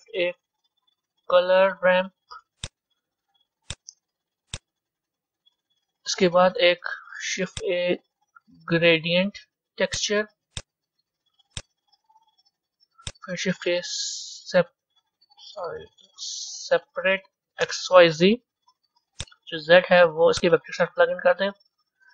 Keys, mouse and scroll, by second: 1.2 shift+a, 5.4-7.3 drag, 7.3 shift+a, 12.2 click, 14.2 shift+a, 19.7 Down, 21.3-22.1 drag.